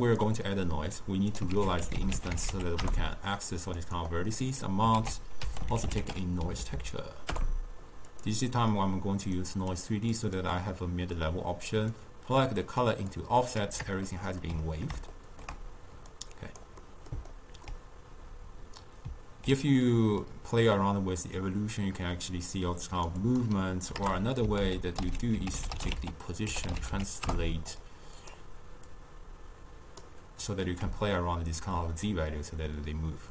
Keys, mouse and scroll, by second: 0.5 middle click, 1.0 click, 1.7 ctrl+a, 4.4 middle click, 5.0 ctrl+a, 6.7 Down, 6.8 Down, 8.5-9.5 middle drag, 9.5 click, 10.2 click, 12.0-14.1 drag, 14.1-16.2 ctrl+middle drag, 16.2 click, 16.9-20.4 middle drag, 20.4-24.7 drag, 24.7 ctrl+a, 29.0-33.3 drag.